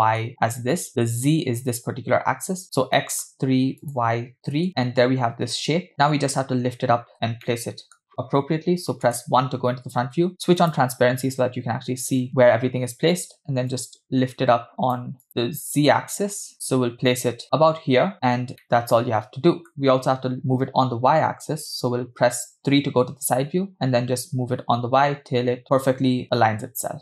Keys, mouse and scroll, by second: 3.0 middle click, 3.9 click, 4.7-5.9 middle drag, 7.5 middle click, 9.1 KP_1, 10.6-11.0 drag, 13.7-15.0 shift+drag, 16.6-18.1 shift+drag, 18.4 scroll down 2, 18.7-19.7 middle drag, 22.2 KP_3, 23.7-27.0 shift+drag.